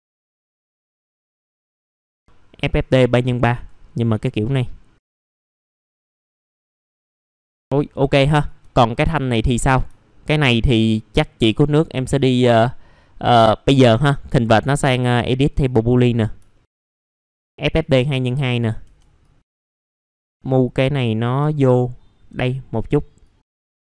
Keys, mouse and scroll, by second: 0.3 scroll down 1, 1.1 typing, 1.4 scroll down 1, 1.5 click, 2.6 click, 3.4 click, 3.6 click, 4.5 click, 5.5-6.1 scroll up 1, 6.1 click, 7.3 F4, 7.4 middle click, 7.4 scroll down 1, 7.8 scroll up 1, 8.3 click, 8.7 alt+middle click, 9.9 alt+middle click, 10.4 scroll up 1, 13.9 right click, 15.5 click, 16.2 scroll down 1, 16.5 alt+middle click, 17.8 click, 18.2 alt+middle click, 18.7 scroll up 1, 19.2 click, 19.5-19.9 scroll up 1, 19.9-21.4 drag, 21.5 alt+middle click, 23.2 click.